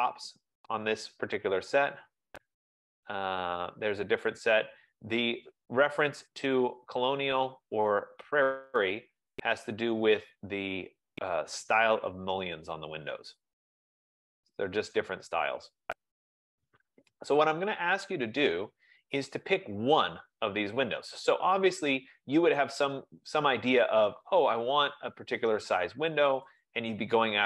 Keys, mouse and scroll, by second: 1.1-1.6 scroll, 2.8-4.0 scroll, 4.1-4.5 scroll, 5.2-6.0 scroll, 6.4-7.0 scroll, 7.1-7.8 scroll, 7.8-8.9 scroll, 9.5 scroll, 10.0-11.0 scroll, 11.0-11.6 scroll, 11.6-12.0 scroll, 15.1-16.5 scroll, 16.8-17.7 scroll, 17.7-18.0 scroll, 18.5-20.0 scroll, 20.0-20.8 scroll, 20.8 scroll, 21.6-22.0 scroll, 22.2 scroll, 27.3 click.